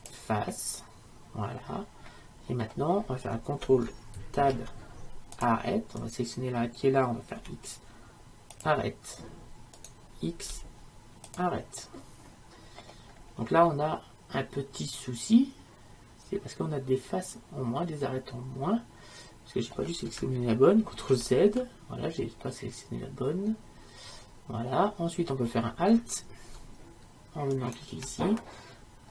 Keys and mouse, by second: 4.4 ctrl+Tab, 7.4 x, 9.8-11.9 drag, 10.6 x, 12.3 middle click, 13.8-15.8 middle drag, 21.1 ctrl+z, 22.5-24.3 middle drag, 27.6-29.1 right drag.